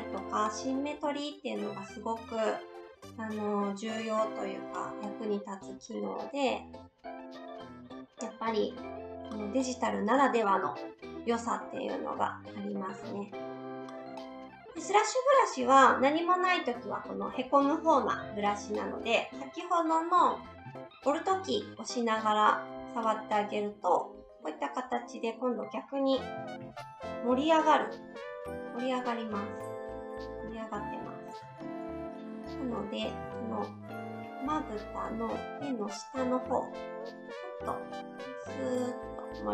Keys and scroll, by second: 18.3 ctrl+z, 26.4 ctrl+alt+z, 31.4 ctrl+z, 34.5 alt+s.